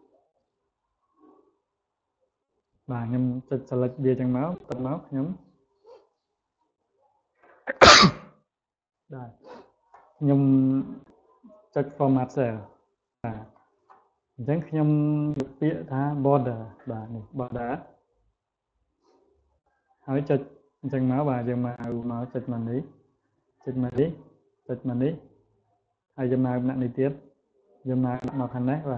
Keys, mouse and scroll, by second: 5.2 right click, 11.4 click, 16.1 click, 19.4 click, 22.4 click, 23.4 click, 24.4 click, 26.5 click, 28.5 click.